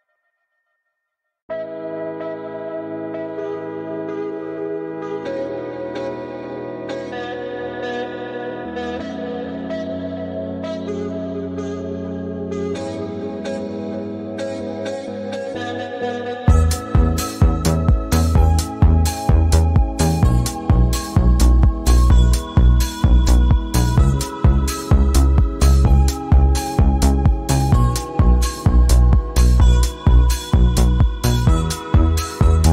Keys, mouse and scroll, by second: 5.8 scroll up 1, 7.0 ctrl+1, 8.3 space, 8.3-9.6 drag, 11.7 click, 13.5-23.1 typing, 24.7-32.7 typing.